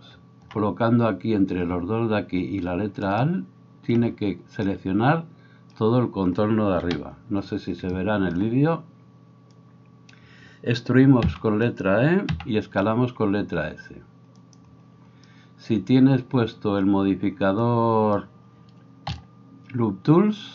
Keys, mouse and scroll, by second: 7.0 KP_7, 12.3 e, 12.8-20.5 middle drag, 12.8 s, 19.1 w.